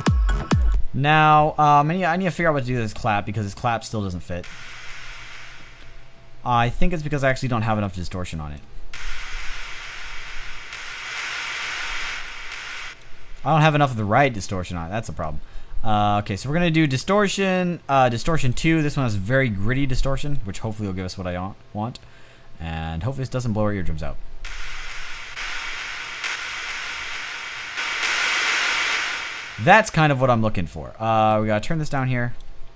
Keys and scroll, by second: 1.2 space, 3.8 space, 4.9 space, 13.2 space, 23.9 space, 28.5 space.